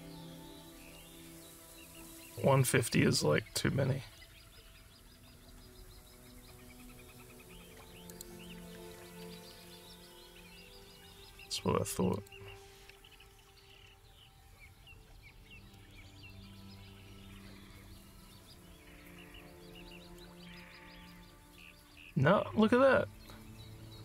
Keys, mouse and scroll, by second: 8.1 click, 12.2 click, 16.3-20.2 alt+drag, 20.9 alt+click.